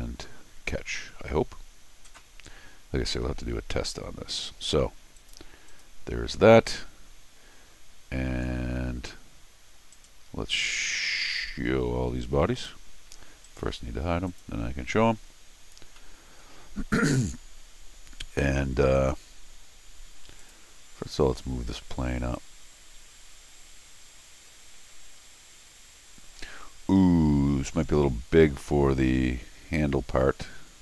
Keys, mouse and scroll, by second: 5.2 click, 5.7 click, 8.5-8.9 scroll down 1, 9.9 right click, 12.6 click, 13.4 right click, 14.3 click, 15.3 scroll down 2, 15.9 scroll down 1, 16.0 middle click, 16.7 middle click, 16.9 middle click, 18.9 click, 20.4 click, 22.3-30.8 drag.